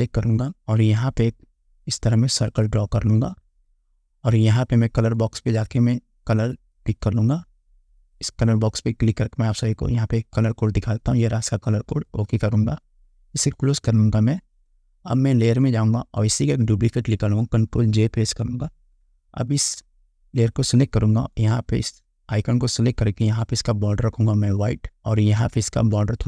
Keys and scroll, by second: 18.5 ctrl+j.